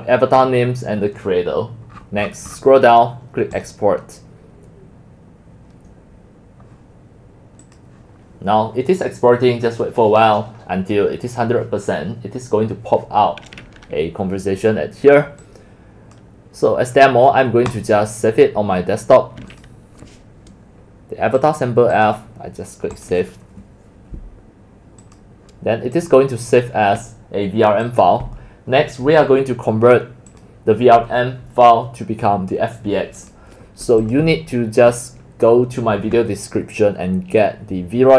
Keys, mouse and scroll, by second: 0.4-1.1 scroll up 1, 1.1-1.8 scroll down 10, 1.8-3.1 scroll down 24, 3.7 click, 7.8-10.3 drag, 12.8 click, 15.4-16.2 drag, 17.7 click, 19.5 click, 21.4 click, 22.0 click, 22.9 click, 25.0 click, 26.0 click, 26.5 click, 27.8 click, 30.3 click, 30.7-32.2 drag, 33.2 click, 34.0 click.